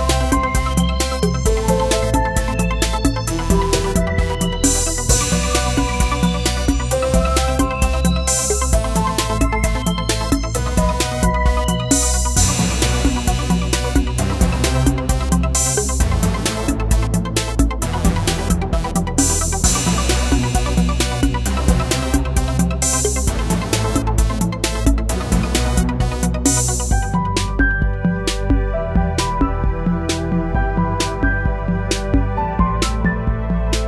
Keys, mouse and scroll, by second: 1.5-10.9 drag, 11.7 right click, 13.3-20.1 drag, 20.1-25.9 drag, 27.1 click, 30.5-33.8 drag.